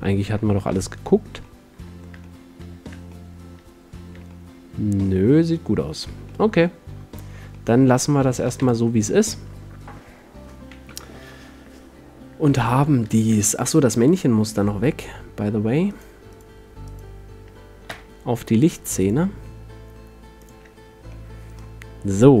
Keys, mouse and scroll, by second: 1.8 middle click, 2.6 middle drag, 5.0 middle click, 6.3 a, 8.6 ctrl+s, 11.1 KP_7, 16.1 click, 18.1 m.